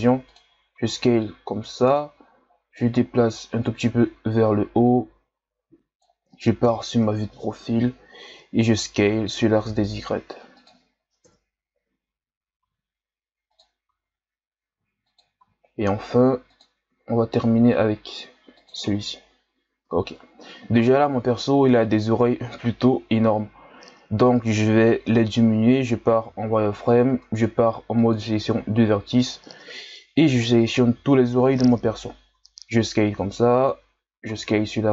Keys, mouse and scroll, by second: 2.7-6.6 drag, 6.6 KP_3, 9.1 s, 11.2 KP_1, 12.6 e, 18.9-20.0 scroll down 3, 20.0-21.8 ctrl+scroll up 6, 21.8 scroll up 2, 21.9-25.0 ctrl+scroll down 4, 26.3 z, 27.1 ctrl+Tab, 29.7 ctrl+KP_Add, 29.9 ctrl+KP_Add, 30.4 ctrl+KP_Add, 31.0 ctrl+KP_Add, 32.3 s, 34.2 s.